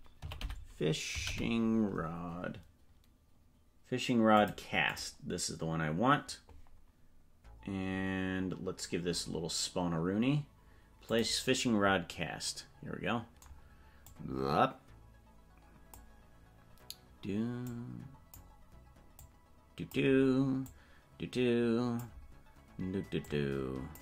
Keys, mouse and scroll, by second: 7.8 scroll down 1, 11.0 click, 11.0 scroll down 8, 14.0-16.5 drag, 17.6 click, 19.1 click, 20.6-22.0 drag, 23.2 click.